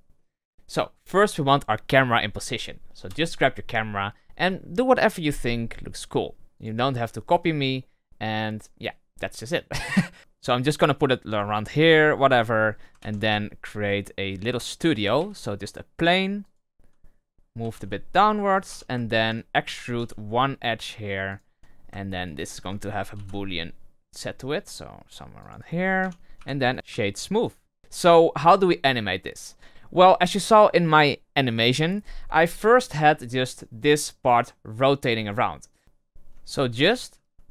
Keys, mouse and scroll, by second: 0.1-2.9 middle drag, 2.9 KP_0, 5.1 click, 6.5 click, 7.0-9.0 middle drag, 9.0-9.7 scroll up 3, 9.7 middle click, 10.1 scroll down 1, 10.2-11.8 ctrl+middle drag, 11.8 click, 12.1 scroll down 2, 12.3-12.6 middle drag, 12.6 scroll down 1, 12.9 shift+a, 15.1 s, 16.9-17.2 scroll down 2, 17.2 middle drag, 17.5 g, 18.6 Tab, 19.0 alt+right click, 19.6 e, 22.2 alt+right click, 23.1 ctrl+b, 25.5 right click, 25.9 Tab, 26.3 w, 26.7 scroll down 4, 26.8 w, 27.8 scroll up 3, 27.8-30.0 scroll down 2, 32.8 right click, 33.4 right click, 33.8 right click, 34.2 right click.